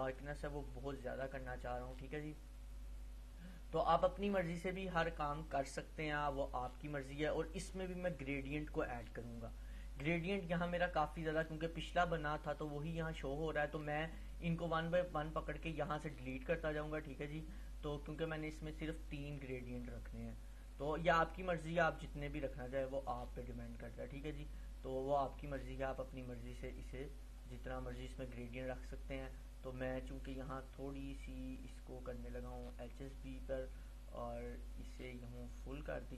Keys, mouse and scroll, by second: 8.9 click, 12.7-14.2 drag.